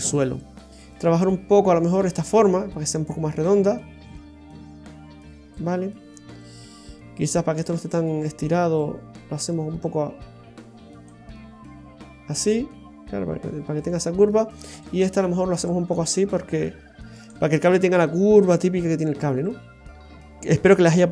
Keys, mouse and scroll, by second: 0.7-2.0 scroll down 5, 2.1 right click, 3.1 click, 7.5 right click, 8.4 click, 11.3 middle click, 13.7 middle click, 14.3-14.7 scroll up 1, 14.7 right click, 15.6 click, 19.5-20.0 scroll down 3, 19.9 middle click.